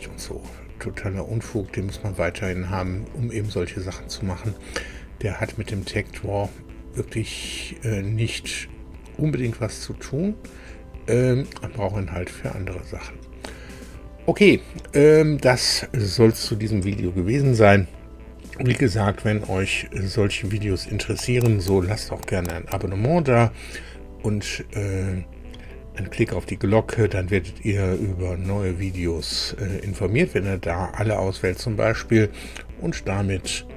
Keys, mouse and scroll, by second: 0.3-1.7 drag, 2.1 shift+click, 3.1-4.7 shift+middle drag, 5.6-6.0 scroll up 2, 6.9 scroll down 2, 7.5-7.9 scroll down 2, 9.2-11.6 middle drag.